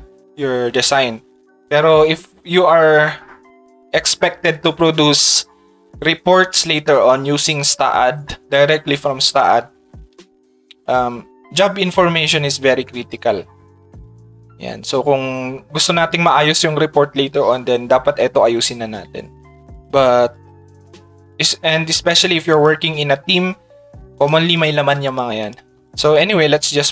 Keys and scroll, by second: 14.0 Tab.